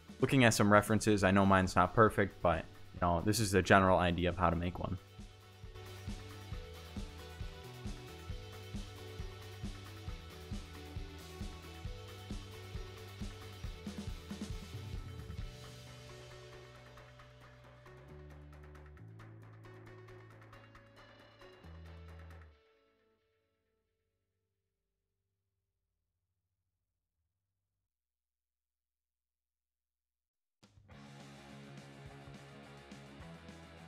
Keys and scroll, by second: 1.0 e, 1.1 s, 1.2 ctrl+z, 1.5 g, 2.1 ctrl+b, 2.9 ctrl+b, 3.3 Tab, 3.7 ctrl+b, 4.1 Tab, 5.1 Tab, 5.4-6.3 typing, 6.0 Return, 6.1 Tab, 7.5 b, 8.2 ctrl+b, 8.9 b, 9.2 Tab, 9.9-15.0 typing, 10.1 Tab, 11.4 Tab, 11.9 Tab, 12.2 ctrl+z, 12.8 Tab, 13.4 Tab, 14.7 Tab, 15.2 Tab, 18.8 0, 18.8 Return, 19.5 Tab, 20.3-22.1 typing, 20.6 Tab, 21.0 Tab, 21.5 Tab, 22.2 Tab, 25.2 Tab, 26.1-27.3 typing, 27.5 Tab, 28.0 Tab, 28.8 Tab, 29.4-31.4 typing, 31.2 Tab, 31.5 Tab, 32.8 s, 33.3 Tab, 33.7 s.